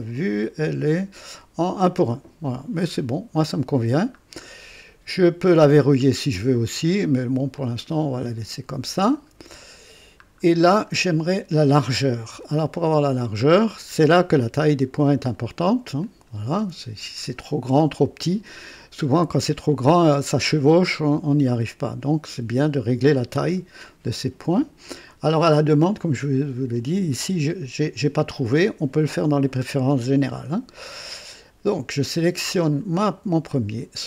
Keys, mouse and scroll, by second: 0.8 click, 2.8 scroll up 1, 4.2 scroll down 1, 5.8 scroll down 1, 7.5-8.8 drag, 9.0-9.4 scroll up 1, 10.2 middle click, 10.2 scroll down 1, 12.4 scroll up 2, 12.9-14.0 middle drag, 14.0 scroll up 1, 16.0 click, 18.5-18.9 scroll up 2.